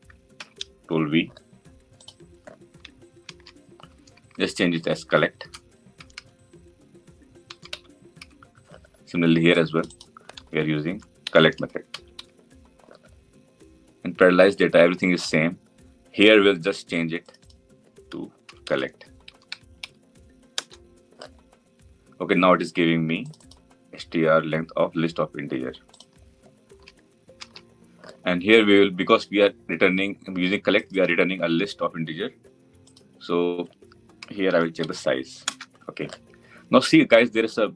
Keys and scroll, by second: 0.3 ctrl+v, 20.4 Return, 35.3 Return.